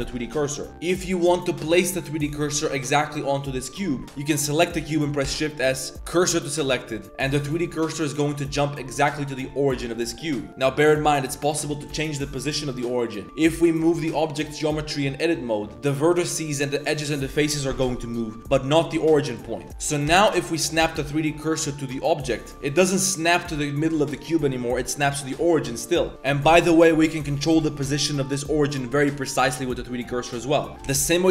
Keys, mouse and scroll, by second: 0.7 g, 1.9 click, 3.2 middle click, 5.2 shift+s, 8.0 shift+drag, 10.5 Tab, 10.5 g, 10.8 Tab, 11.3 Tab, 11.7 g, 13.8 g, 18.9 g, 19.7 Tab, 20.1 shift+s, 20.8 shift+s, 30.7 Tab, 30.8 shift+s.